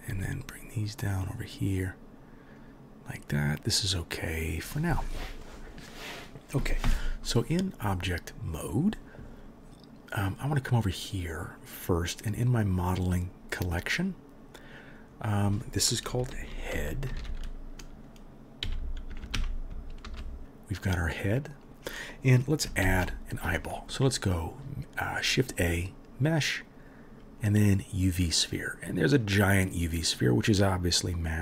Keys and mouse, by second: 0.1 g, 2.7-11.6 middle drag, 6.9 Tab, 11.6 click, 11.7-15.1 middle drag, 15.1-20.4 drag, 19.2 o, 20.4 middle click, 20.7 click, 20.8-31.4 middle drag, 22.8 shift+a.